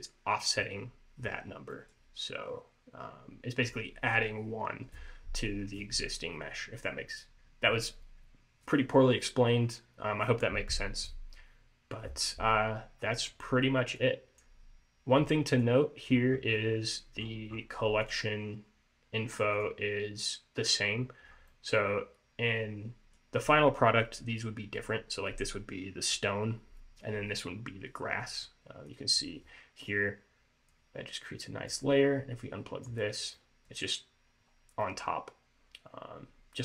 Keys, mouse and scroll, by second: 1.8 middle click, 12.7-14.1 scroll down 4, 14.1 click, 15.7 click, 16.4 scroll up 2, 16.7 middle click, 17.3-18.1 scroll up 5, 18.1 click, 21.1-21.5 scroll down 4, 21.5 scroll up 1, 21.6 middle click, 24.4 scroll up 1, 29.0 click, 30.8 click, 32.5 click, 33.5 middle click, 34.6-34.9 scroll up 1, 34.9 middle click.